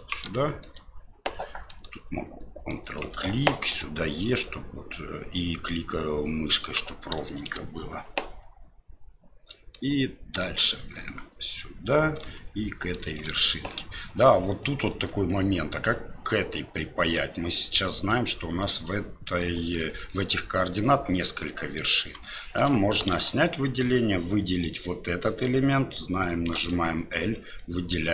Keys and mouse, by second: 0.3 shift+middle click, 3.7 e, 7.2 shift+middle click, 10.3 e, 19.9 shift+middle click, 22.3 shift+middle click, 23.1 alt+a, 27.6 l.